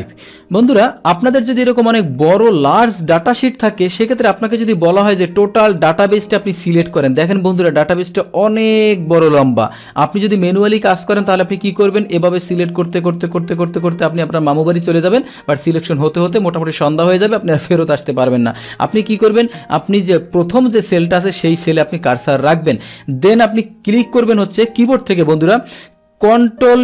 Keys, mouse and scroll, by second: 0.6 click, 1.6 click, 2.5 click, 4.0 click, 5.0 click, 5.7 click, 7.3-9.7 drag, 10.2 click, 11.3-18.9 drag, 19.2 click, 20.5 click.